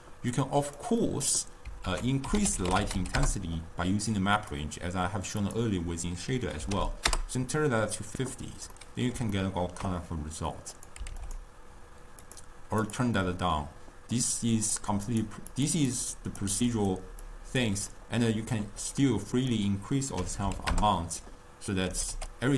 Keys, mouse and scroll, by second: 0.1 click, 0.9 click, 2.0 ctrl+a, 5.5-8.6 drag, 8.8-10.8 middle drag, 10.8 click, 12.3 click, 14.2 click, 15.1 click, 15.6 click, 15.9-16.9 drag, 17.3-18.0 drag, 18.0-19.4 middle drag, 19.4-22.0 drag, 22.0 g.